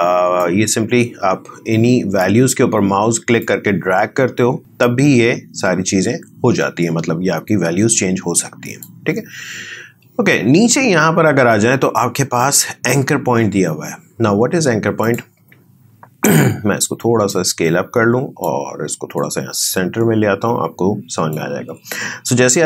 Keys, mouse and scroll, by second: 0.3-10.1 drag, 19.6-22.6 drag.